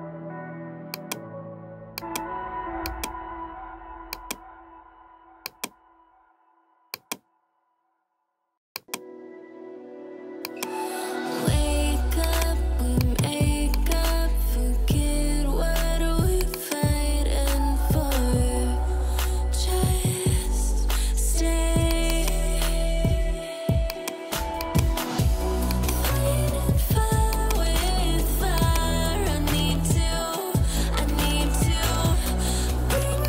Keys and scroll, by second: 17.8-19.4 typing, 21.0 ctrl+j.